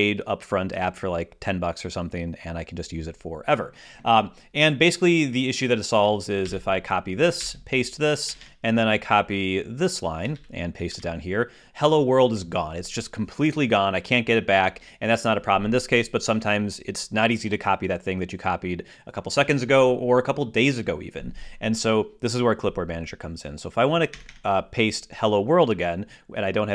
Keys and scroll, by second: 6.2 super+c, 7.2 super+v, 8.1 super+Return, 10.1 super+c, 10.7 super+v.